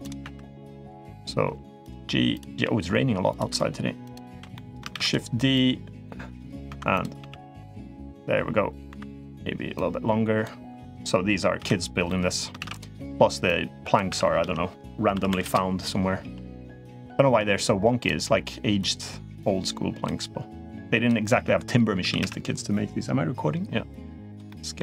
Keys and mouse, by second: 0.0 2, 0.3 click, 0.9 click, 1.2 g, 2.1 click, 2.4 g, 3.8 click, 4.1 l, 4.3 middle click, 4.7 shift+d, 5.3 click, 6.4 2, 6.7 click, 6.9 g, 8.7 3, 8.9 click, 9.5-10.2 drag, 10.6 click, 11.3 l, 11.8-12.6 middle drag, 12.4 shift+d, 13.2-13.7 drag, 13.8 r, 16.8 click, 18.6-19.8 drag, 20.5 click, 21.0 middle click, 21.8 s, 24.3 middle click.